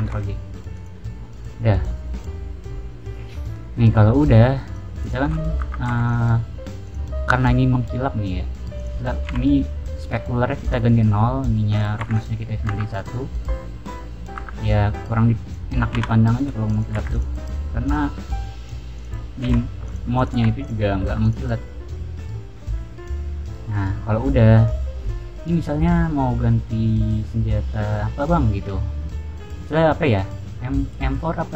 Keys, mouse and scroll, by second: 0.7 click, 1.0-1.5 middle drag, 1.6 middle drag, 2.3-4.0 middle drag, 4.6 click, 4.9 click, 5.2-5.6 middle drag, 5.6 Tab, 5.7 middle click, 5.8 3, 6.0 click, 6.8 click, 7.7 middle click, 8.7 click, 9.2 0, 10.6 click, 11.6 click, 11.9 1, 12.0 click, 12.4 scroll down 1, 12.6 Tab, 12.8 click, 13.1-13.7 middle drag, 13.9 middle click, 14.3 Tab, 14.5 click, 15.4 click, 15.9 0, 16.2 click, 16.6 click, 16.9 1, 17.0 click, 17.8 click, 18.9 click, 19.4 0, 19.8 click, 20.1 click, 20.3 1, 20.5 click, 21.0 Tab, 21.2 click, 21.5 scroll down 1, 21.8-23.6 middle drag, 24.0 scroll down 1, 24.2-24.7 middle drag, 25.3-28.8 scroll down 1, 28.8-29.2 scroll down 1, 29.4-30.0 middle drag, 30.5-31.5 middle drag.